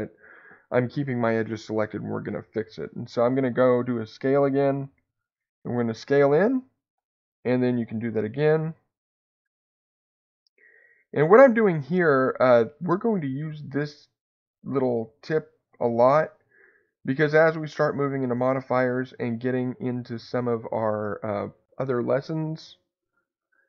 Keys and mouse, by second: 6.8 click, 8.1 e, 8.1 s, 10.1 click, 10.8 e, 11.1 s, 14.2 click, 16.1 s, 18.2 click.